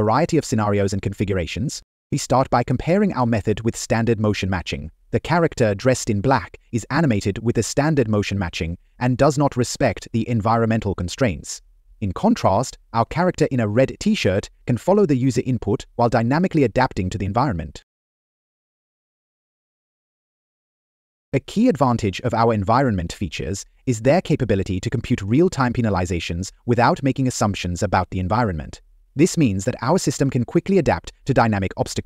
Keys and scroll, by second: 4.3 Left, 5.3 Down, 13.5 Down, 18.0 Down, 21.3 Left, 21.7 Down, 22.1 Right, 25.0 Down, 25.4 Left, 28.7 Down, 29.4 Up, 30.0 Left, 30.8 Left, 31.9 Right.